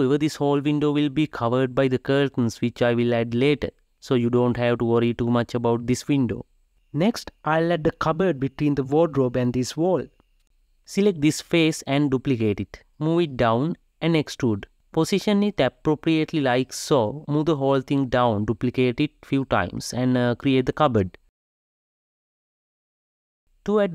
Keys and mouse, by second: 1.4-3.9 drag, 3.9 KP_Decimal, 4.1-8.6 middle drag, 8.6 g, 10.1-11.3 ctrl+middle drag, 11.4 click, 11.7 ctrl+middle click, 12.8 ctrl+middle click, 13.1 shift+d, 14.3 g, 15.0 e, 15.7 middle click, 15.9 g, 18.6 shift+d.